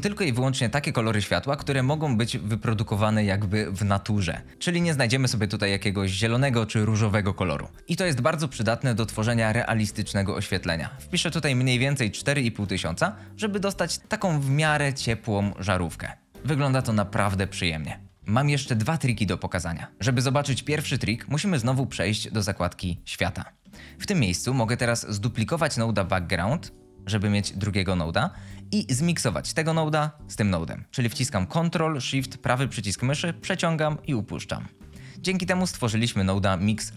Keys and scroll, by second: 10.3-10.7 typing, 11.8 typing, 25.7 d.